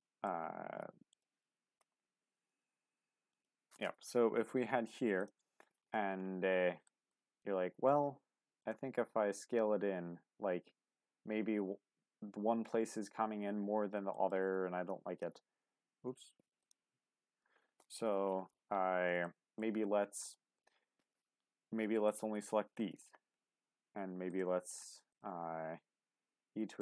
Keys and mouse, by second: 0.6 g, 1.1 click, 1.8 ctrl+z, 2.7 g, 3.3-4.8 drag, 6.8 shift+middle click, 8.6 click, 8.9 s, 15.4 ctrl+s, 17.4 ctrl+z, 19.2 shift+middle click, 20.3 shift+middle click, 24.3 ctrl+click, 26.3 e.